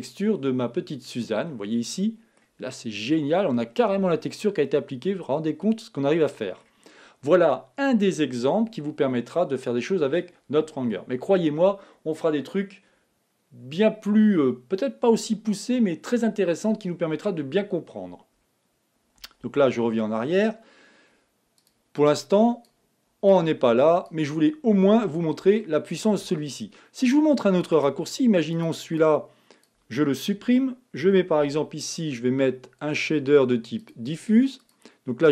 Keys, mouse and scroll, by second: 0.9-1.5 scroll up 3, 1.5-2.7 middle drag, 2.7-3.4 scroll up 5, 3.4 middle click, 4.7-6.4 middle drag, 19.9 z, 21.6 click, 22.1-23.4 drag, 24.9-25.6 scroll down 5, 25.6-27.1 shift+middle drag, 27.1-27.7 scroll up 1, 27.7 scroll up 2, 27.8 click, 29.0-30.4 drag, 30.4 x, 31.4 shift+a.